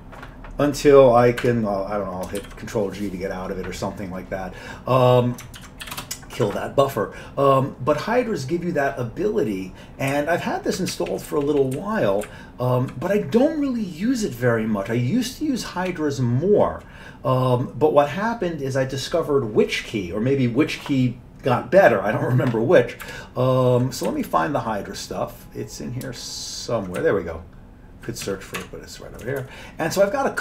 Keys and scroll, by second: 0.0-0.4 typing, 1.4 Escape, 2.4 ctrl+g, 5.6 ctrl+x, 5.8 k, 6.0 Return, 10.1 Up, 10.6 Up, 10.9 Down, 11.1 Down, 11.3 Down, 11.4 Down, 11.6 Down, 11.9 Down, 12.3 Up, 12.8 Up, 12.8 Up, 23.0 Up, 23.6 Up, 24.1 Down, 24.3 Down, 27.0-28.3 Down, 28.6 Tab, 29.2 Down, 29.4 Down.